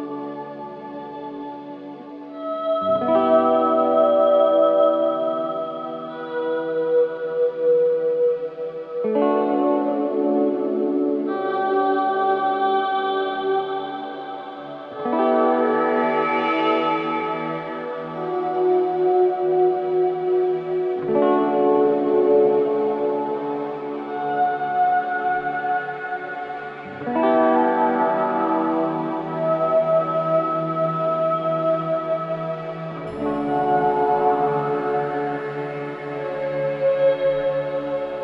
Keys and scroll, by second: 1.9 f, 3.8 f, 4.9 f, 5.8 f, 11.2 ], 12.6 4, 13.3 3, 15.1 5, 21.2 F9, 21.8 3, 28.9 ], 32.7 ], 36.3 alt+], 37.3 ].